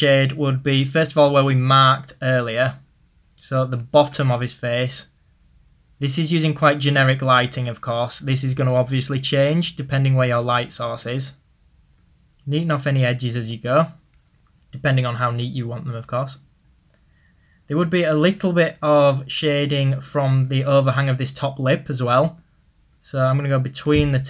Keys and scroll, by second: 11.2-14.8 typing, 16.0 typing.